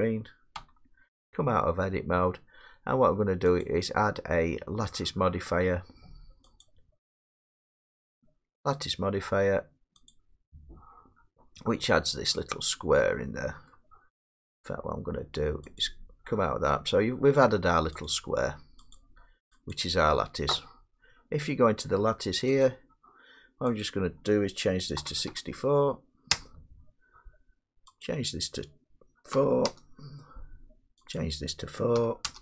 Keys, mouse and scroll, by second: 0.6 Tab, 3.6 click, 6.7 click, 10.1 click, 11.5 scroll, 11.6 middle click, 12.0 middle click, 12.1 middle click, 12.3 middle click, 12.5 middle click, 13.7 middle click, 15.8 click, 18.7 click, 19.0 click, 19.7 click, 22.7 click, 23.8 click, 25.0 typing, 26.3 Return, 28.1 click, 29.1-29.9 typing, 31.2 click, 32.0 typing, 32.3 Return.